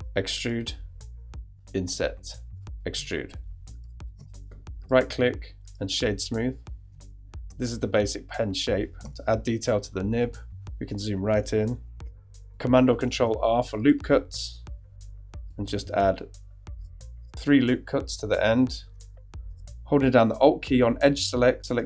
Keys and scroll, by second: 1.5 i, 2.9 e, 4.1 super+Tab, 9.0 shift+Tab, 9.8 super+Tab, 13.1 super+r, 15.7 super+r, 17.3 super+r.